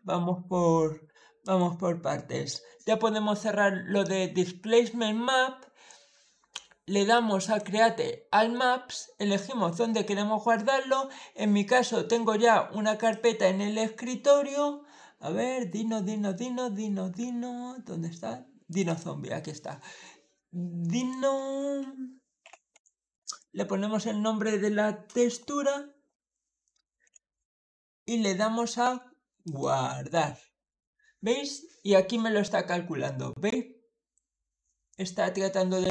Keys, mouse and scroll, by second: 1.3 click, 7.3 click, 11.3-12.0 scroll down 2, 12.1 scroll up 2, 12.9 click, 13.9 scroll down 1, 14.8-15.6 scroll up 1, 16.1 scroll up 1, 18.5 click, 18.7 click, 20.8 click, 21.4-23.4 typing, 26.9 o, 29.3 click.